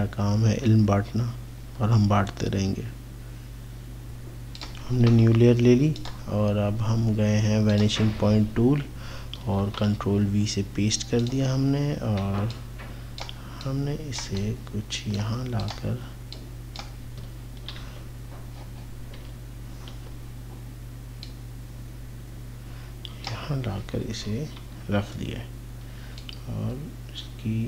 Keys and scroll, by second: 17.8 ctrl+z, 19.3 ctrl+c, 19.9 ctrl+v, 24.1 ctrl+t.